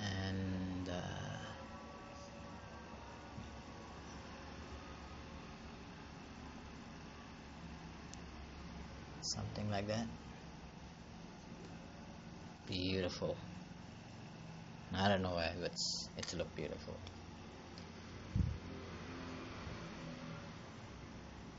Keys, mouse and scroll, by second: 7.7 scroll down 4, 8.3 scroll up 4, 10.2 click, 12.5 click.